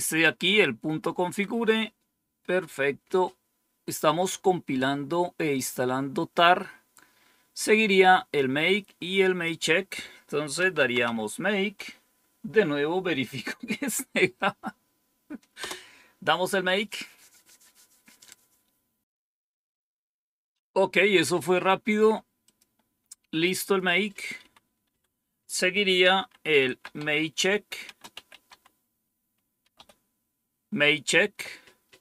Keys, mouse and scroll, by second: 1.1 Page_Down, 6.5-7.4 scroll down 2, 9.4 click, 10.3-11.4 typing, 15.5 Return, 22.4 click, 23.6 click, 24.4 Up, 24.8 Down, 26.0-30.2 typing.